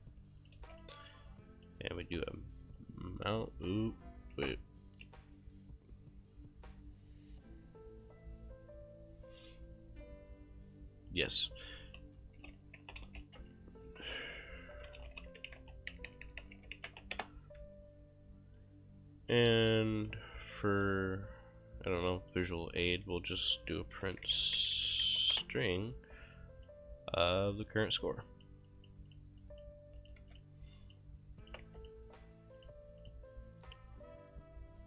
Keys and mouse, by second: 0.4 shift+click, 0.7 q, 0.8 click, 2.8 click, 11.1 click, 11.9-17.5 typing, 18.6 click, 20.6 right click, 21.9 click, 23.0 click, 23.8-25.2 typing, 25.3 Return, 25.3 KP_Enter, 26.2 click, 27.3 click, 30.0 shift+click, 30.2 q, 30.3 click, 31.5 shift+click, 31.7 q, 32.1 click.